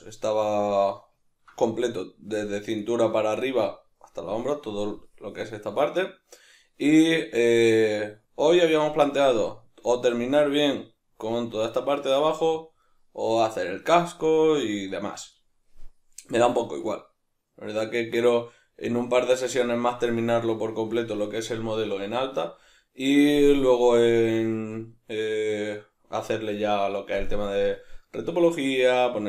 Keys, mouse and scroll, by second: 19.4-24.5 middle drag, 26.1-29.2 middle drag.